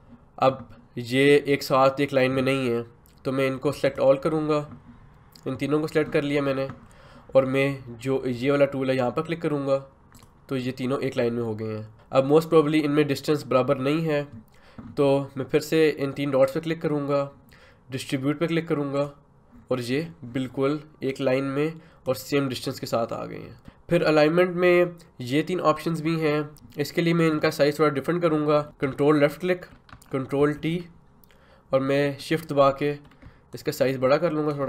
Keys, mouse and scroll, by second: 19.0-23.6 drag, 26.5 Return, 29.3 ctrl+click, 30.4 ctrl+t, 33.5-34.6 shift+drag.